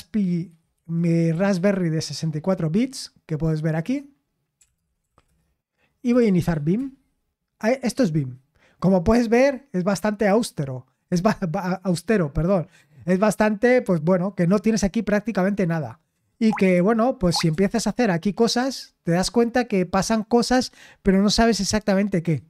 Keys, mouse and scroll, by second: 0.0-1.5 typing, 2.0 Return, 2.8 typing, 4.3-6.9 typing, 16.4-18.3 typing.